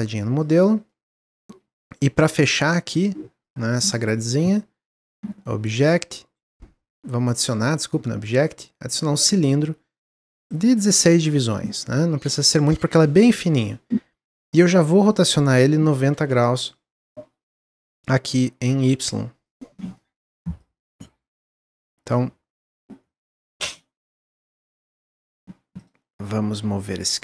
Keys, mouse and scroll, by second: 0.5 click, 0.8-2.8 middle drag, 2.8 click, 3.3 click, 5.5-8.7 drag, 9.9-11.9 drag, 11.9-12.3 scroll down 1, 12.3-14.9 shift+middle drag, 14.9-17.3 drag, 17.3-18.7 middle drag, 18.7-20.7 drag, 20.7 middle click, 21.2 s, 23.1 click, 23.4-24.5 middle drag, 24.5 click, 25.7 click.